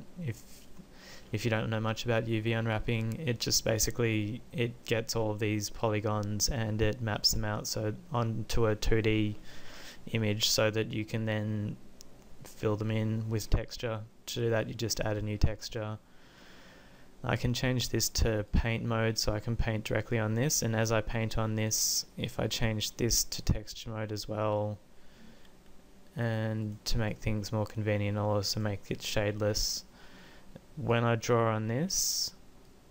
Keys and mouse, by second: 14.5-16.5 drag, 17.7-18.9 drag, 22.3 click.